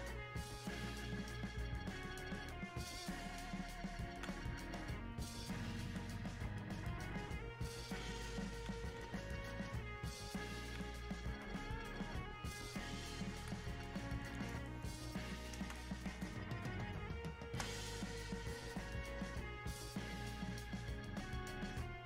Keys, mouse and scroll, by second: 15.7 space, 16.6 click, 16.7 space, 17.9-22.0 drag.